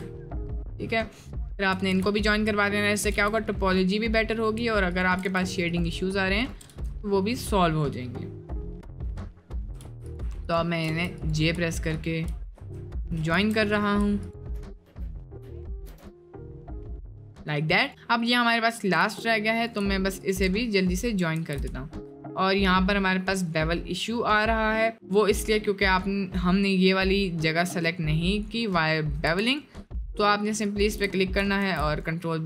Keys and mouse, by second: 2.0 j, 2.2 click, 2.9 shift+drag, 3.2 j, 4.3 click, 4.9 shift+click, 5.3 j, 5.7 click, 6.4 shift+click, 6.8 j, 6.9-7.6 middle drag, 7.9 middle click, 8.8 click, 9.8 j, 10.0 click, 10.9 j, 11.9 shift+click, 12.6 j, 13.3 ctrl+z, 14.3 shift+click, 14.8 j, 15.2 click, 15.7 shift+click, 15.8 j, 16.7 middle click, 17.1 middle click, 17.8 click, 19.0 j, 19.6 click, 20.8 middle click, 21.4 ctrl+z, 21.7 shift+middle click, 22.3 middle click, 23.2 middle click, 23.7-24.7 middle drag, 24.8 middle click, 25.5 middle click, 29.1 2, 29.4 alt+click, 31.6 ctrl+b, 32.1 middle click.